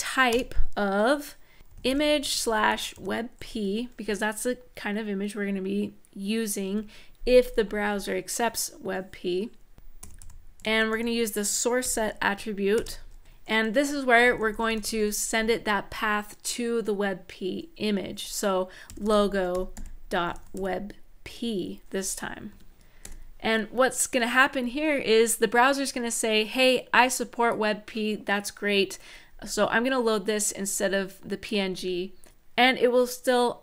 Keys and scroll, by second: 0.1 Return, 1.3-2.8 typing, 6.4 End, 9.5-12.5 typing, 13.2 Left, 13.7-15.1 typing, 18.4-21.5 typing, 22.2 Tab, 22.8 super+s.